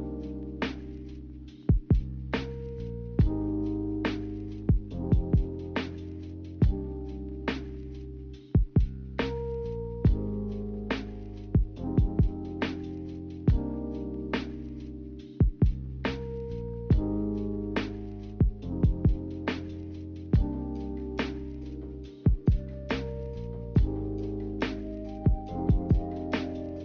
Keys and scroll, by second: 9.3 2.